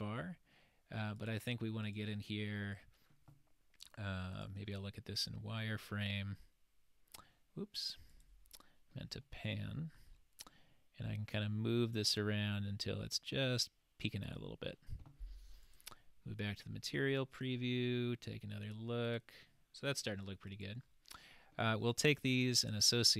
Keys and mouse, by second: 1.2 click, 1.9 click, 4.4 click, 5.9-7.4 middle drag, 8.2 click, 9.3-10.1 shift+middle drag, 11.4-13.7 drag, 15.7 click, 17.1-18.2 middle drag, 22.6 click.